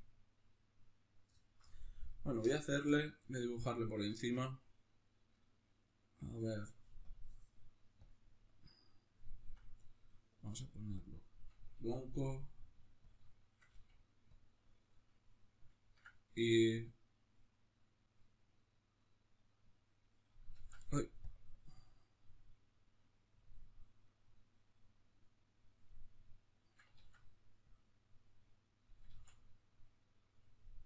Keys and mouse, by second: 6.9-11.9 drag, 11.9 f, 12.8 click, 13.1 shift+middle click, 13.5 f, 14.1 click, 15.5-19.1 ctrl+middle drag, 19.1-21.0 drag, 20.3 ctrl+z, 22.1-26.0 drag, 26.0-27.4 middle drag, 26.7 ctrl+z, 27.4-30.7 drag, 28.9 ctrl+z, 30.7-30.8 middle drag.